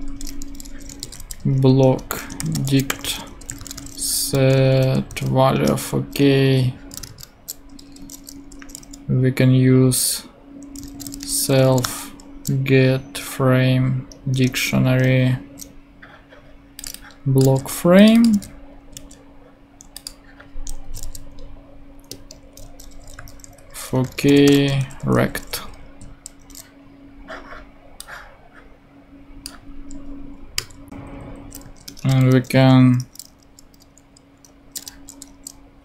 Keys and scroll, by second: 0.1 Return, 0.6-5.1 typing, 5.5 Return, 7.0-11.6 typing, 14.3 Return, 17.4 super+c, 18.3 super+v, 18.9 super+z, 19.8 shift+super+z, 20.8 shift+Left, 21.0 shift+super+v, 23.1 Tab, 23.5-25.3 typing, 25.7 shift+super+Right, 26.5 super+;, 30.5 BackSpace, 30.8 Down, 31.5 super+Down, 31.6 super+Right, 31.8 super+Return, 33.0 [, 34.7 b.